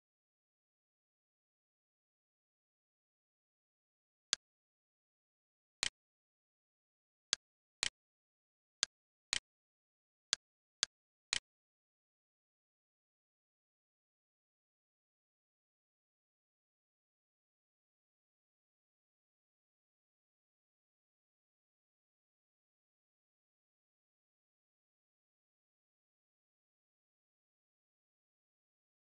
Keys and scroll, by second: 0.0 3, 2.2 shift+8, 2.8 2, 3.2 Return, 6.4 ctrl+c, 8.5 d, 11.6 ctrl+v, 12.6 Return.